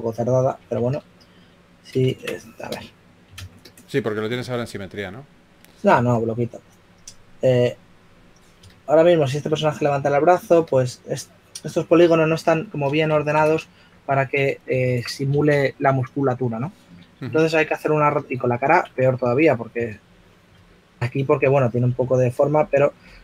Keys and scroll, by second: 1.7 x, 3.2 super+z, 6.1-7.6 typing, 10.7 w, 15.4 super+z, 16.7 q, 18.4-19.5 typing, 22.2-23.0 typing.